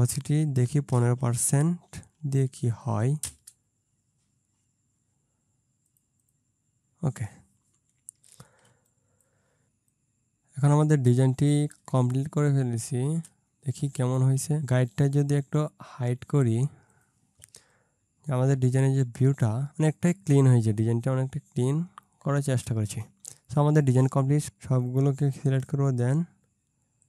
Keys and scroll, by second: 0.7 1, 2.4 5, 3.3 Return, 8.7 ctrl+space, 9.6 space, 11.8 ctrl+space, 14.0 space, 19.7 ctrl+space.